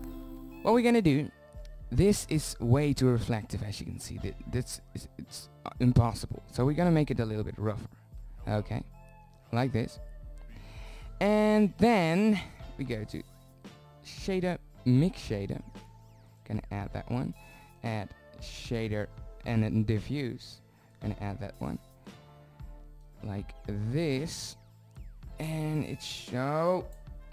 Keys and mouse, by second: 0.2-0.7 drag, 4.1 middle drag, 7.8 middle drag, 11.1-14.9 drag, 17.3-19.2 drag, 21.6-22.7 drag, 26.5-27.2 drag.